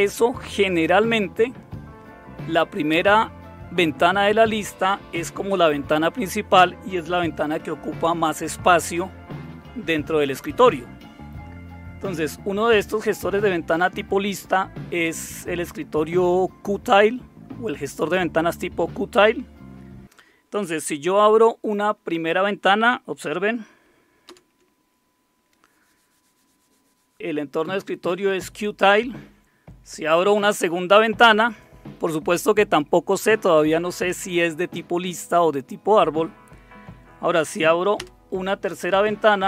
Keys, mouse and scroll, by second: 24.2 super+Return, 29.4 super+Return, 37.9 super+Return.